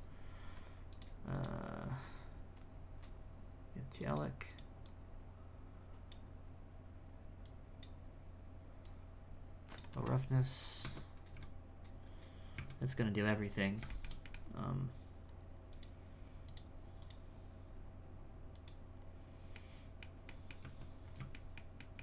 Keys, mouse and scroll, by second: 0.9 click, 4.0 click, 4.5 click, 4.8-10.1 drag, 10.1-10.8 scroll down 4, 10.8 Tab, 11.3 x, 12.7 z, 13.1-13.9 scroll down 4, 13.9-15.7 shift+middle drag, 15.7-18.8 drag, 19.5-20.6 middle drag, 20.6 Tab, 21.0 scroll up 3, 21.3 shift+middle click.